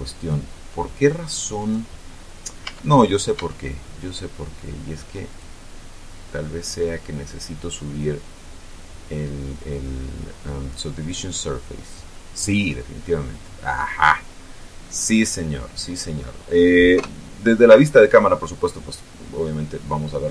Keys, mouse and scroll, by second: 0.1 click, 1.5 right click, 2.0 middle click, 2.5 Tab, 3.3 Tab, 5.2 click, 10.9 click, 13.6 middle click, 13.8 scroll down 1, 14.0-14.6 scroll up 1, 15.0-15.5 scroll up 1, 15.5 middle click, 16.9 KP_0.